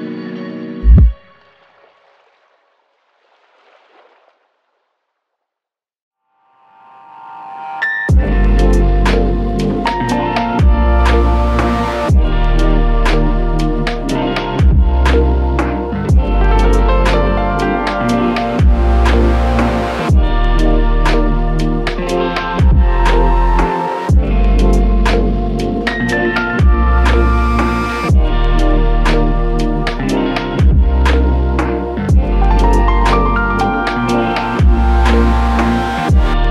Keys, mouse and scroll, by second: 0.3 alt+shift+click, 1.5 alt+click, 2.6 alt+click, 3.5 alt+click, 3.7 ctrl+click, 4.6 ctrl+click, 6.5 shift+click, 8.9 alt+click, 26.9 alt+click, 28.5 alt+l, 28.6 ctrl+click, 33.3 ctrl+click, 34.2 shift+click, 36.0 alt+click.